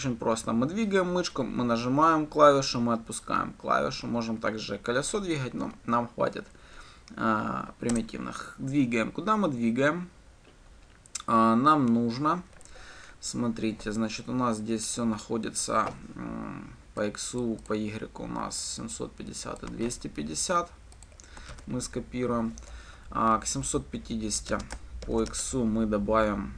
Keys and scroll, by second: 8.2 Return, 20.1 ctrl+c, 21.8 ctrl+v.